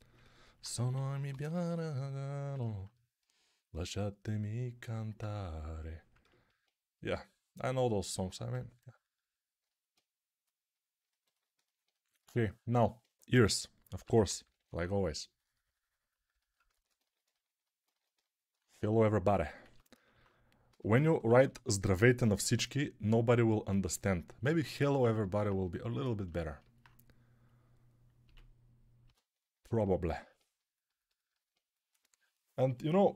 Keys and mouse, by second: 0.7-1.6 typing, 13.8-14.6 typing, 17.3-20.6 alt+drag, 17.3-20.6 alt+right drag, 19.5 a, 20.6 g, 21.0 ], 21.2 ], 21.3 ], 28.1 a, 28.9 a, 29.3-33.1 ctrl+alt+right drag, 31.1-33.1 alt+drag, 31.1-33.1 alt+middle drag.